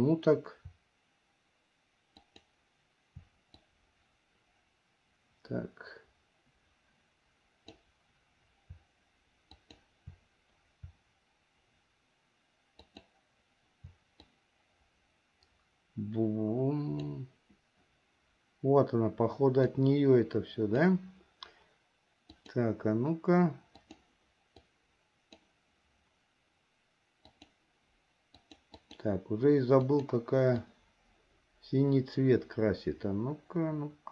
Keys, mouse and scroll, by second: 3.8-8.0 drag, 9.6 shift+click, 12.8 shift+click, 14.3-17.3 drag, 19.8-21.1 drag, 22.5-24.2 drag, 24.8 click, 27.4-28.5 drag, 28.8-30.3 drag, 30.8-34.1 drag.